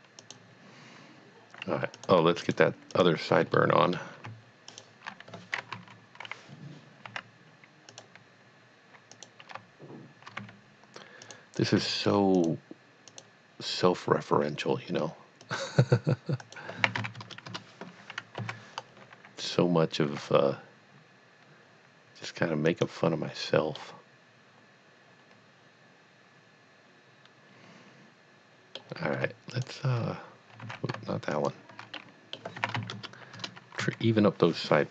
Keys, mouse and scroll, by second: 0.2 click, 1.9 click, 2.4 shift+click, 2.9 shift+double click, 3.6 middle click, 4.7 shift+click, 5.7 KP_3, 7.0 e, 8.0 click, 9.1 click, 10.7 g, 11.4 click, 11.6 click, 11.9 g, 12.4 click, 13.1 click, 15.4 click, 16.4 click, 16.8 s, 17.1 z, 17.2 KP_0, 17.6 KP_Enter, 18.4 KP_1, 20.0 g, 22.7 click, 23.8 middle click, 29.5 shift+click, 30.7 z, 31.3 shift+click, 31.9 middle click, 32.6 s, 32.9 z, 33.0 KP_0, 33.4 KP_Enter, 33.8 KP_1.